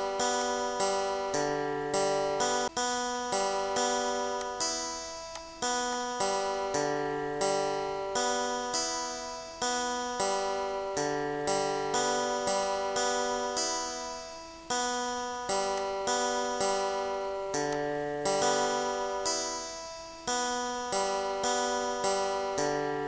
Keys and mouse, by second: 0.0 click, 0.9 click, 1.3 shift+click, 2.0 shift+click, 2.5 Down, 4.4 Down, 5.0 click, 5.6 click, 8.1 ctrl+shift+click, 10.3 click, 11.5 click, 12.3 click, 12.9 click, 13.3 click, 13.9 shift+click, 14.4 click, 15.9 click, 16.3 click, 16.7-19.5 typing, 17.4 click, 18.2 click, 19.2 click, 20.3 click, 21.1 click.